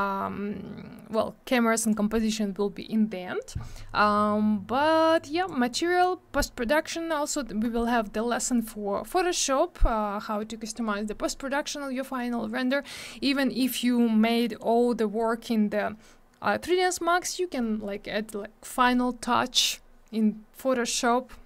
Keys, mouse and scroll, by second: 1.1 click, 5.1 click, 6.0 click, 11.3 scroll down 1, 14.2 scroll up 1.